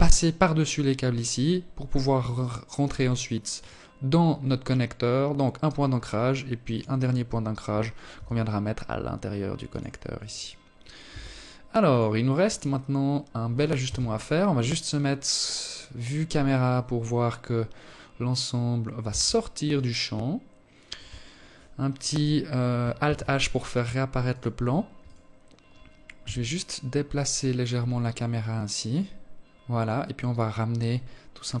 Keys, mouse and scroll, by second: 2.1 ctrl+click, 5.2 ctrl+click, 6.6 r, 8.8 right click, 9.6 r, 10.7 scroll down 5, 11.4 scroll up 1, 12.4 KP_0, 17.6 Tab, 18.2 right click, 21.6 alt+h, 22.8 right click, 23.6 right click, 24.7 g.